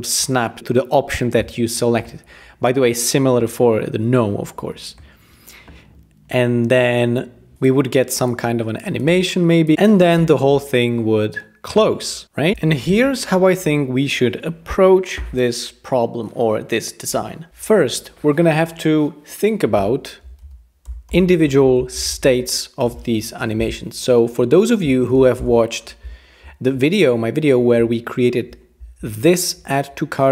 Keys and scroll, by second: 20.4-23.6 typing, 24.6-25.6 typing.